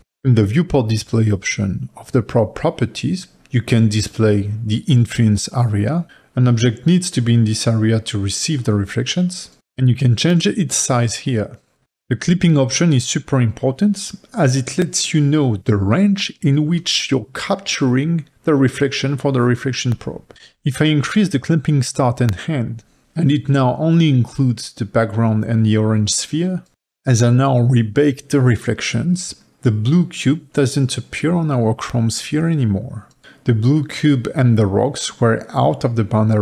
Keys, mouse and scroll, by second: 0.0 middle click, 0.3-3.4 middle drag, 3.4 click, 6.0 click, 14.3 click, 15.0-18.0 middle drag, 18.0-19.9 drag, 19.9-22.5 middle drag, 22.5-23.5 drag, 23.5-24.4 scroll down 3, 24.4 scroll down 3, 25.7-28.4 drag, 28.4 scroll up 7, 28.6 middle click, 29.4 click, 30.5 click, 31.7-36.4 middle drag.